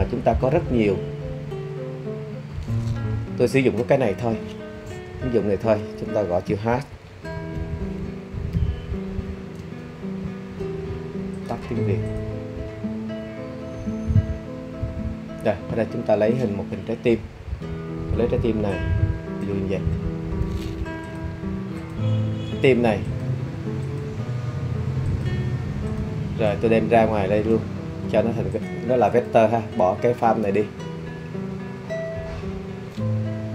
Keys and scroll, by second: 5.0-5.5 typing, 7.0 h, 7.6 e, 9.1 a, 9.6 Return.